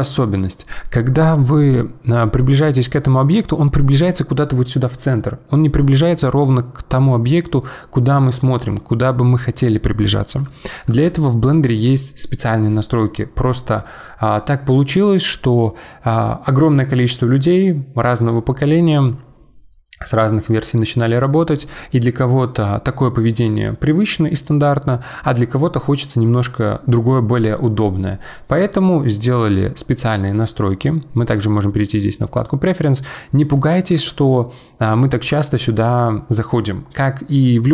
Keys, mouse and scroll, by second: 2.2-3.6 scroll up 9, 5.4-6.5 scroll down 10, 6.5-8.6 scroll up 9, 8.6-10.0 scroll down 8, 10.0-13.7 middle drag, 31.2-34.4 drag.